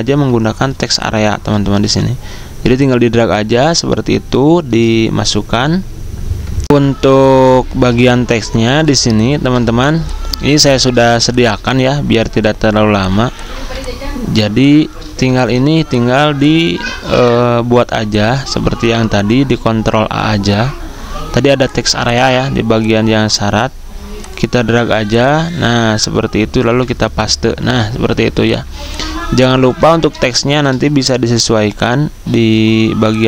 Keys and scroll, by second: 0.4 z, 6.6 F9, 11.1 v, 13.5 z, 15.1-17.3 typing, 18.4 ctrl+a, 26.6 ctrl+v, 28.6 z, 29.8 v, 32.4 z.